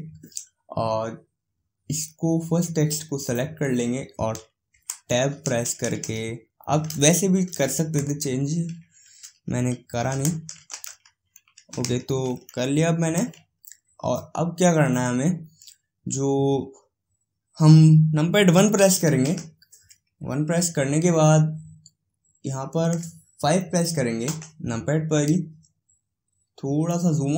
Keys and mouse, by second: 3.5-5.0 drag, 5.0 Tab, 5.5 BackSpace, 5.8 BackSpace, 10.2 b, 10.5 l, 19.5 KP_1, 22.9-24.5 middle drag, 24.5 KP_5.